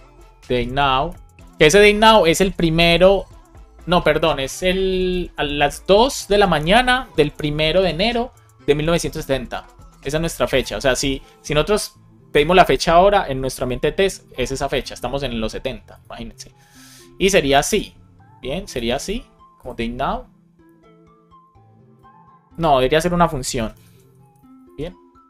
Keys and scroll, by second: 0.5 shift+n, 1.0 Return, 1.4 super+s, 10.9 super+c, 17.6 super+v, 18.7 super+s, 23.1-24.3 typing, 24.6 super+s.